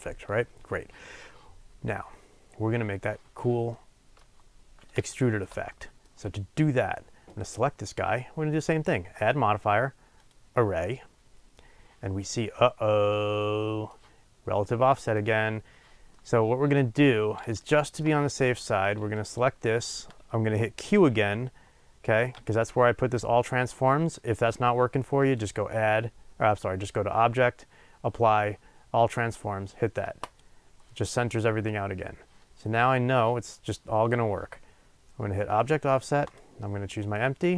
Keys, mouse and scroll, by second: 3.7-7.3 middle drag, 4.5-5.1 scroll down 2, 7.3 click, 10.3-13.2 drag, 12.2-13.2 scroll up 2, 13.2-15.2 middle drag, 15.2 click, 16.1-19.3 middle drag, 17.0-17.6 scroll down 1, 19.3 click, 30.5-35.6 drag, 37.3-37.5 drag.